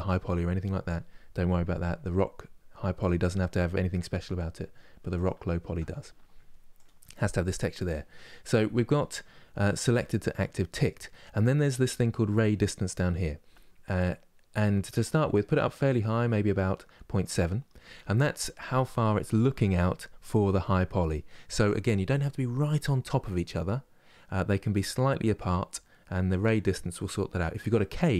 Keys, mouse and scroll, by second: 1.9 click, 14.8-28.1 drag.